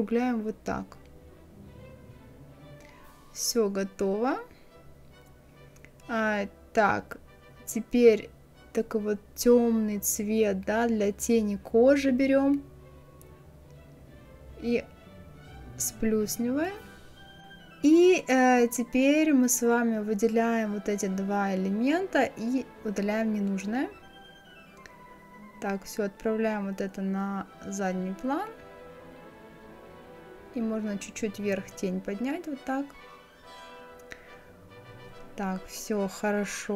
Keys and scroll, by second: 30.3 Up.